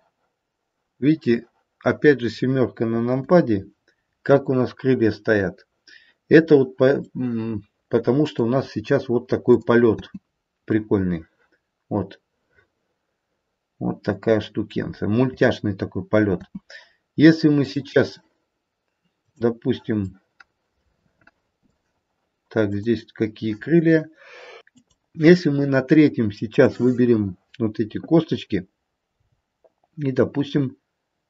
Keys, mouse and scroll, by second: 3.1 KP_7, 7.1 middle click, 7.9 middle click, 9.5 middle click, 9.5 click, 10.0 space, 10.6 middle click, 12.4 middle click, 12.9 middle click, 16.4 space, 17.6 click, 19.2 click, 20.1 middle click, 20.6 middle click, 21.2 middle click, 22.6 click, 26.5 click, 29.1 g.